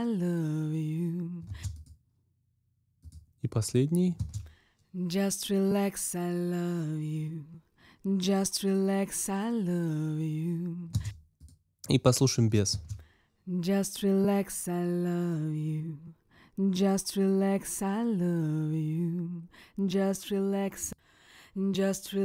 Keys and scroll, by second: 1.4 space, 10.9 space, 12.6 space.